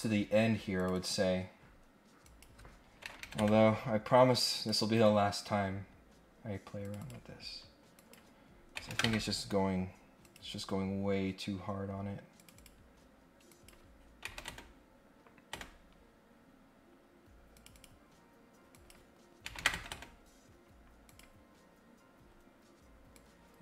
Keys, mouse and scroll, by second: 0.8 click, 0.9 click, 2.2 click, 4.5 click, 5.6-6.2 scroll up 2, 6.8 click, 7.0 click, 7.9 click, 10.2 click, 11.3 scroll up 1, 12.3 click, 12.5 click, 13.5 click, 16.4 scroll up 1, 17.5 click, 18.7 click, 21.0 click, 23.1 click.